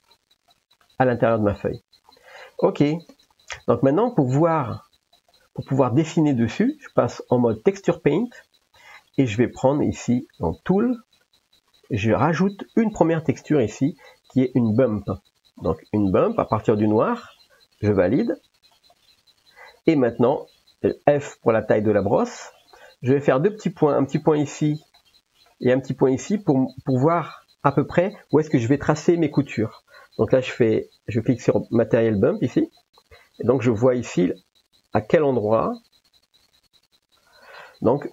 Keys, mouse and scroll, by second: 0.5 middle click, 3.2 ctrl+s, 5.3 click, 10.7 click, 13.6-19.1 drag, 20.5 f, 22.7-23.1 middle drag, 24.1 click, 25.1 middle click, 26.3 click, 32.7 click, 36.6 click.